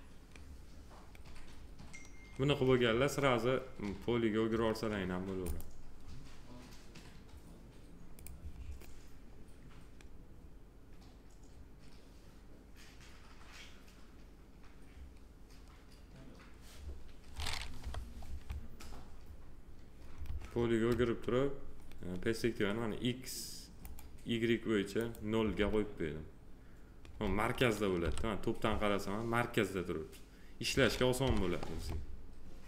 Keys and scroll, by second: 17.8 p, 28.0 t, 31.2 p.